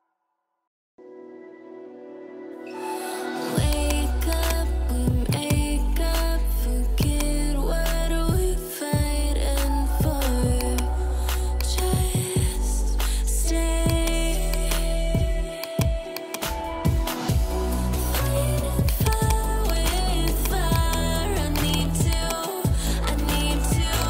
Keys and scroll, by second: 5.7 ], 10.9 [, 18.1 ], 20.9 [.